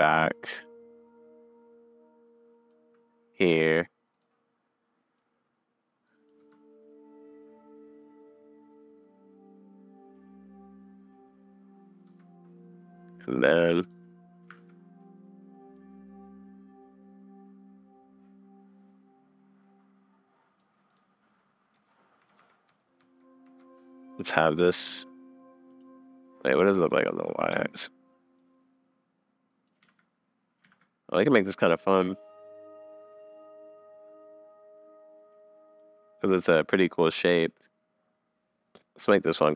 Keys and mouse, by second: 0.7-2.8 shift+middle drag, 3.6 click, 5.2 middle click, 6.4 space, 8.2 click, 10.1 middle click, 12.1 space, 13.9 click, 14.8 super+s, 15.7 click, 16.3 click, 18.5-20.6 drag, 20.9 click, 21.7 Up, 22.2 Down, 22.4 Down, 22.7 Up, 23.0 Up, 23.4 Down, 23.6 Up, 24.8 Down, 25.7 click, 27.0 click, 28.5-29.7 drag, 29.8 super+z, 30.6 super+z, 36.7-38.8 middle drag.